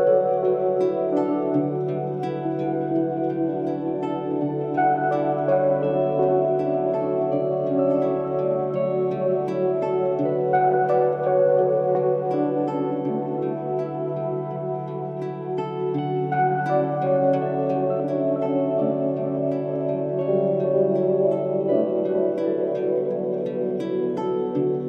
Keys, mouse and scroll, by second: 0.4-13.1 drag, 17.7-19.8 drag, 19.8 right click, 20.4-24.8 drag.